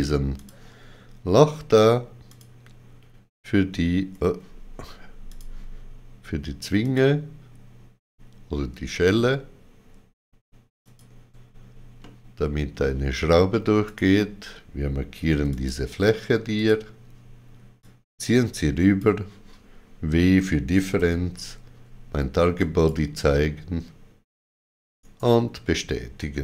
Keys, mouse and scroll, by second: 0.3 click, 2.2 click, 5.2 click, 10.7 shift+click, 11.9 middle click, 13.8 shift+click, 15.2 3, 15.4 click, 16.5 click, 17.7 click, 20.9 w, 22.5 click, 22.5 w, 24.9 right click.